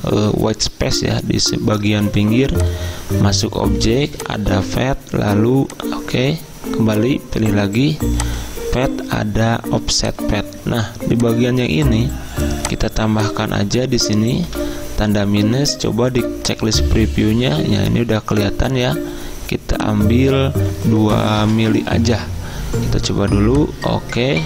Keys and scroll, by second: 14.5 -, 21.4 2.